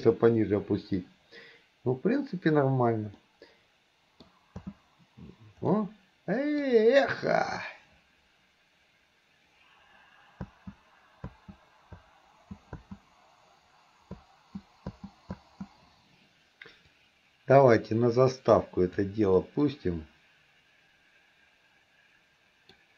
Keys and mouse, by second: 0.0 KP_1, 3.3-4.4 middle drag, 4.9 space, 5.8-6.8 middle drag, 10.5-12.8 typing, 14.2 space, 15.0 space, 17.0-19.1 drag, 17.0 space, 19.4-22.8 middle drag.